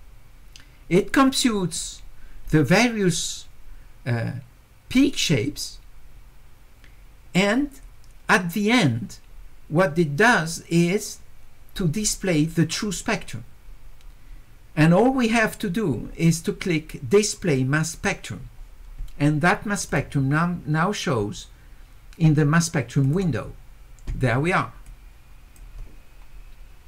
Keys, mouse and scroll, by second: 17.9 click, 19.9 click, 23.0 click, 24.9 click.